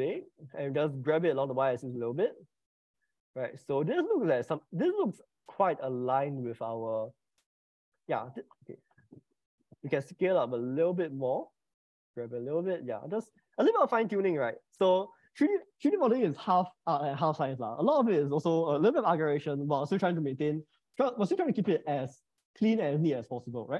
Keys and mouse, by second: 0.3 click, 1.5 g, 2.4 y, 9.5 Return, 10.2 s, 12.6 g, 13.4 y.